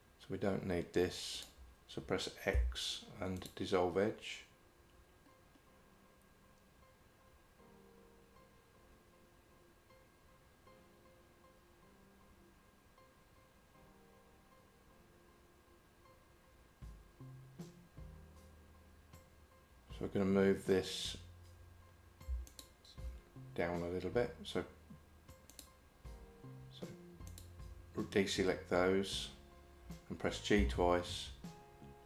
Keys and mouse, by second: 1.4 shift+click, 2.6 x, 22.5 alt+click, 25.6 shift+click, 27.3 shift+click, 30.6 g.